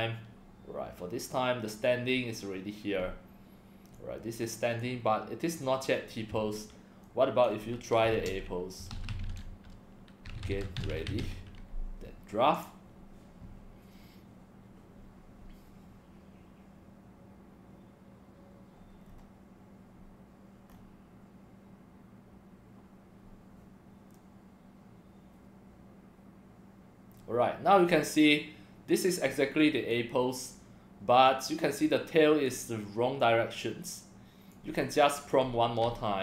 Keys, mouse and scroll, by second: 3.9-4.8 drag, 7.0 click, 8.1-11.7 typing, 12.5 click, 19.0 scroll down 3, 20.7 scroll up 4, 28.1-29.2 drag, 29.9-31.3 drag, 31.8-32.4 drag, 33.2-34.5 drag, 35.2 click.